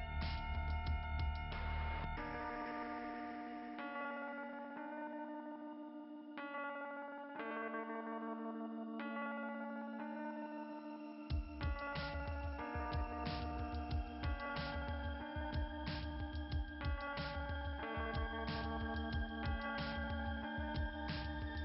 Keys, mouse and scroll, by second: 1.2-2.1 scroll up 3, 4.2 click, 4.6 right click, 7.4 click, 8.3 right click, 9.9 click, 11.3 click, 14.1 click, 14.4 click, 14.7 click, 15.0 click, 15.3 click, 16.5 click.